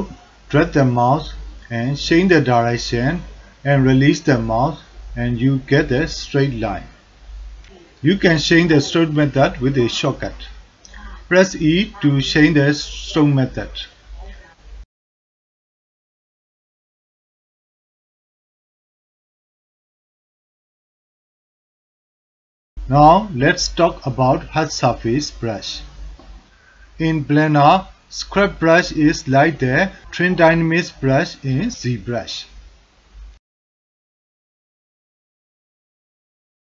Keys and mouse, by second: 3.4-5.4 drag, 6.2-7.3 drag, 10.9 e, 11.0 e, 15.0 click, 17.9 e, 20.1-21.1 drag, 21.4-21.9 drag, 22.1 drag, 22.6 alt+middle click, 24.7 f, 29.2 click, 30.8-33.6 drag, 33.8 click, 33.9 alt+middle click, 34.2 ctrl+alt+middle click, 34.6 alt+shift+middle click, 34.9 middle click, 35.3-36.6 drag.